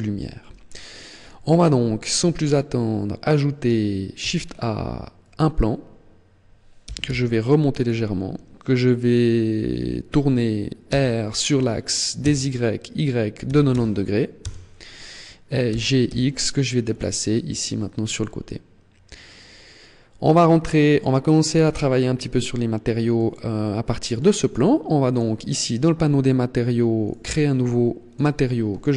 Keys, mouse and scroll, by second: 2.3 middle click, 3.9 shift+a, 6.6 g, 7.6 click, 10.7 r, 15.5 g, 16.7 click, 16.9 middle click, 19.1 middle click, 22.9 middle click, 23.3 middle click, 24.8 click, 26.8 click, 27.8 click.